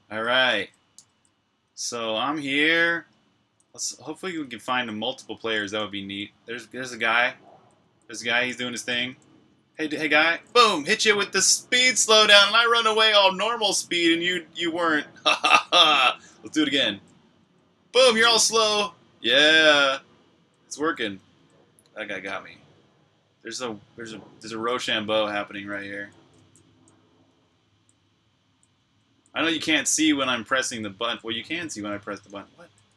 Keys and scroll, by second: 1.2-2.7 typing, 9.9-11.7 typing, 13.4-14.5 typing, 15.7-18.6 typing, 20.1-22.5 typing, 24.0-32.9 typing.